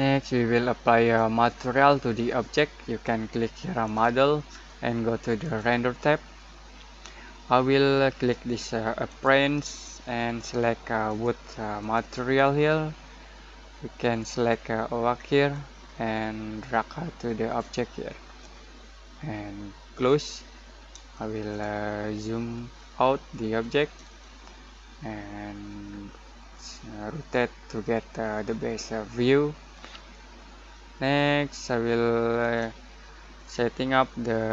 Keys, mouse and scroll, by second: 3.8 click, 9.1-19.9 drag, 21.1 shift+middle click, 21.6 scroll down 1, 21.9-23.3 scroll up 1, 23.3 middle click, 24.2-34.5 shift+middle drag.